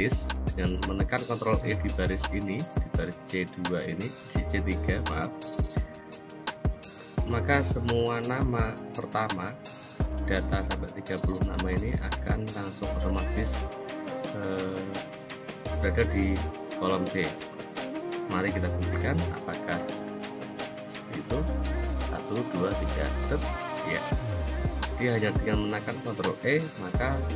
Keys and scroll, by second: 22.6 ctrl+e.